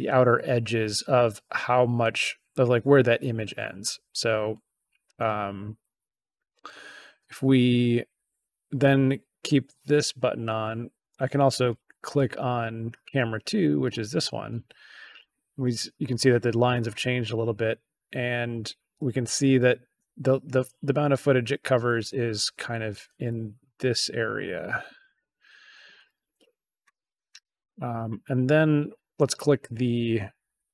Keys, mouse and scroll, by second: 13.6 click.